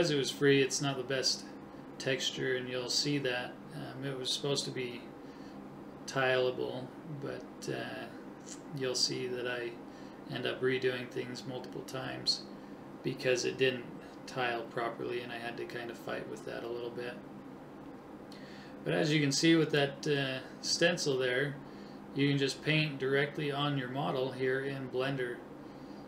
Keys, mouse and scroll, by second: 3.3-6.8 middle drag, 6.8-8.6 drag, 10.9 ], 11.2 ], 11.7 ], 13.0-14.8 drag.